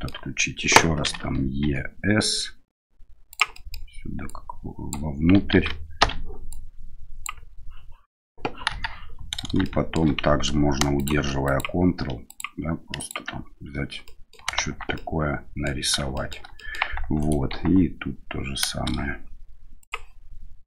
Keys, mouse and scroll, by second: 1.0 i, 3.6 click, 4.3 click, 5.5 ctrl+z, 6.0 o, 6.5 click, 8.7 KP_1, 9.7 shift+middle click, 11.0 ctrl+click, 11.5 ctrl+click, 12.3 ctrl+click, 14.0 middle click, 14.6 Tab, 14.9-15.7 middle drag, 16.1 shift+middle drag, 16.6 middle click, 17.2 right click, 17.5 Tab, 19.8 click.